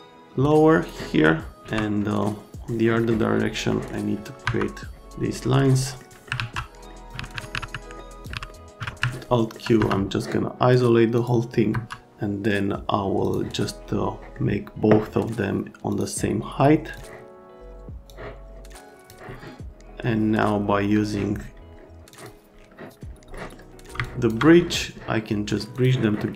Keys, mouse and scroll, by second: 1.6 alt+1, 3.0 right click, 3.7 right click, 4.4 F3, 5.2 right click, 5.8-6.3 scroll down 2, 6.3 alt+1, 6.8-7.3 scroll down 2, 7.1 click, 7.1 alt+1, 7.3 alt+1, 7.5 right click, 7.5 alt+1, 7.7 alt+right click, 8.2 middle click, 8.3 alt+1, 8.5 right click, 9.3 alt+right click, 9.7 F3, 11.1 click, 11.7 F3, 13.2 click, 14.2 middle click, 15.9 click, 16.8 click, 18.1 click, 22.1 click, 23.3 right click, 24.0 ctrl+click, 25.7 middle click, 26.1 right click.